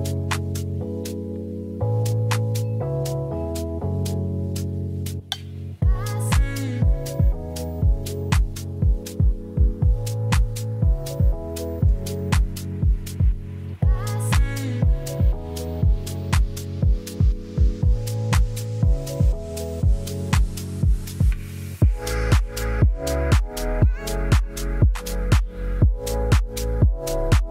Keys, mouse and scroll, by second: 1.7 click, 6.2 click, 8.0 click, 8.6 KP_1, 9.2-9.8 middle drag, 9.8 click, 10.4 click, 11.2-11.6 drag, 11.7 drag, 12.0 click, 16.0 click, 17.5 ctrl+s, 17.6 click, 18.0 click, 18.6 shift+click, 19.2 click, 19.9-21.3 drag, 23.7 click, 26.1 middle click, 26.6 Tab, 27.3 u.